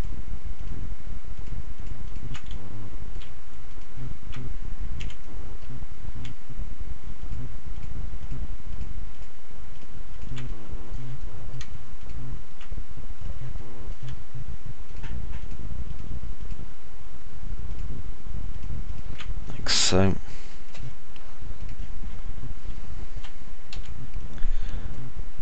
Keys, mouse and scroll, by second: 0.5 ctrl+right click, 1.8 ctrl+right click, 3.0 ctrl+right click, 3.8 alt+click, 3.8 alt+middle click, 3.8 alt+right click, 6.1 F3, 8.5 ctrl+right click, 9.5 ctrl+right click, 11.8 click, 11.8 middle click, 11.8 right click, 16.6 ctrl+right click, 17.6 ctrl+right click, 24.0 alt+click, 24.0 alt+middle click, 24.0 alt+right click.